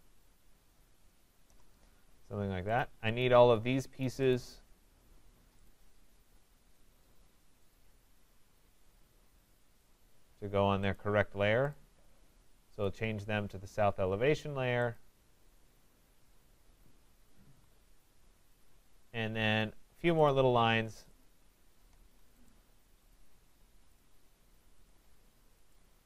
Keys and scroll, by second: 17.4 Escape, 21.9 Return.